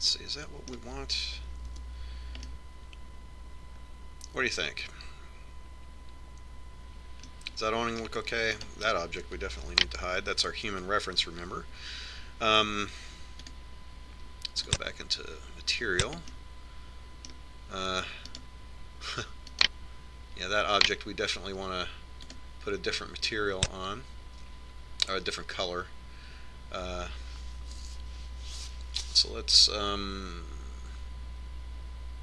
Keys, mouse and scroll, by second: 1.1-2.9 middle drag, 2.9 KP_5, 3.9 middle click, 4.5-5.6 middle drag, 7.7 middle click, 9.8-11.5 right drag, 10.9 h, 14.7-16.6 drag, 17.6-19.6 middle drag, 19.6-22.6 right drag, 23.6-26.6 drag.